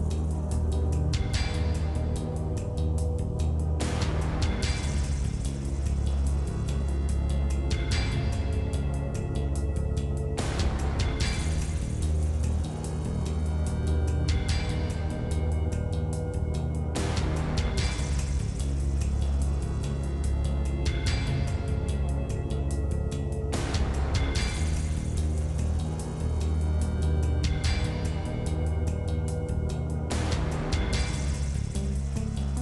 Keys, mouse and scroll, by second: 0.8-2.1 drag, 2.5 click, 2.8 shift+middle click, 3.1 click, 3.3 scroll up 1, 3.4 shift+middle click, 3.9 scroll up 1, 4.0-6.1 shift+middle drag, 8.7 shift+middle click, 9.5 scroll up 1, 9.7 middle click, 10.2 click, 10.8 click, 11.4 click, 12.2 shift+middle click, 13.1-14.4 drag, 14.4 f, 14.7 click, 15.4 middle click, 15.8 ctrl+z, 15.8 ctrl+z, 15.9 ctrl+z, 16.7 click, 17.4 f, 17.6 middle click, 18.3 shift+click, 18.7 f, 19.1 click, 19.9-20.9 shift+middle drag, 21.1 click, 22.2 alt+h, 22.6-23.9 drag, 23.9 alt+h, 24.5-25.0 scroll up 1, 27.2-28.5 drag, 28.6 shift+click, 29.4 e, 30.1-31.6 middle drag, 31.6 e.